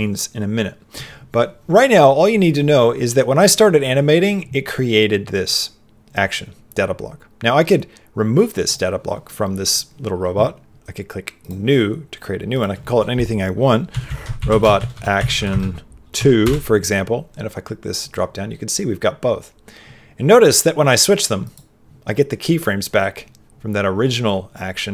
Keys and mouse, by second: 8.6 click, 11.4 click, 12.5-16.4 drag, 17.9 click.